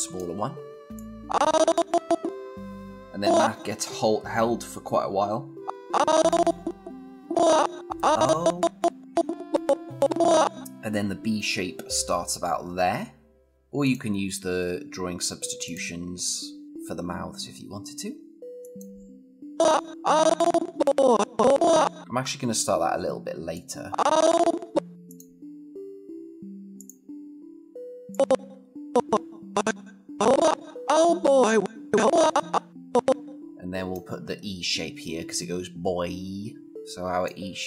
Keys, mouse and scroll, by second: 13.4 click, 18.4 click, 19.5-22.0 click, 22.0 ctrl+z, 23.3-24.9 click, 36.7-37.3 click.